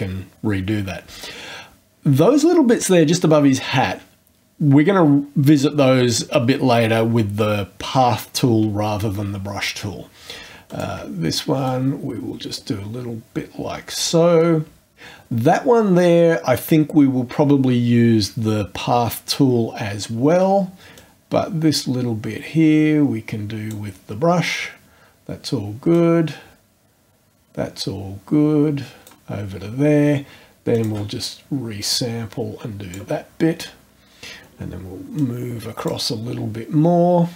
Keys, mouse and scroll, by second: 10.7 shift+click, 11.7 click, 20.9-23.9 drag, 25.9-29.3 drag, 30.7 shift+click, 31.8-33.1 drag, 35.2 click.